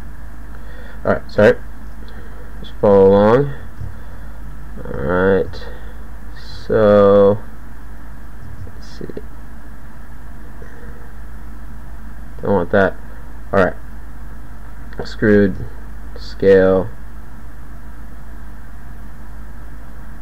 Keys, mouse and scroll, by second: 0.5 click, 1.4 KP_1, 3.1 ctrl+a, 5.3 ctrl+a, 6.7 ctrl+a, 8.6 ctrl+a, 15.1 e, 15.5 ctrl+a, 16.5 g, 19.0 g, 19.9 g.